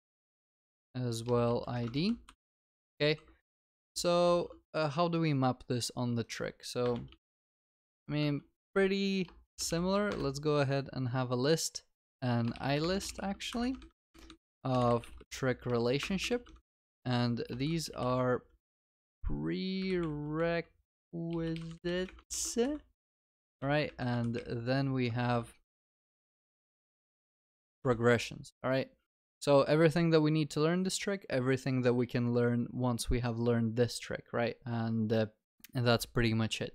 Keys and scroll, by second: 0.5 Tab, 1.9 ctrl+s, 3.9 ctrl+z, 6.8 ctrl+s, 8.3 Tab, 10.1 Return, 13.6 Escape, 16.9 ctrl+s, 22.4 ctrl+s, 23.4 ctrl+v, 25.1 ctrl+w, 27.5 ctrl+w, 27.6 ctrl+s.